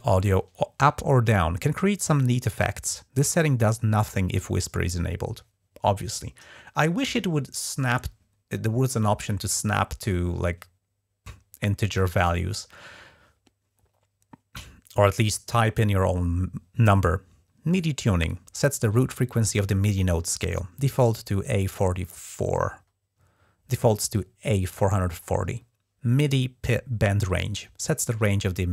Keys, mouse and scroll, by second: 25.4-25.8 scroll down 1.